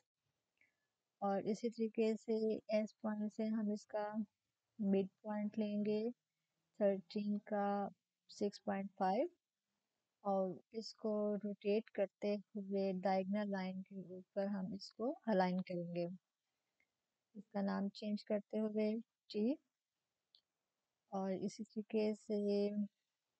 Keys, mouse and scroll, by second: 2.7 click, 6.9 click, 9.8 click, 12.8-17.9 drag, 17.9 t, 20.1 click.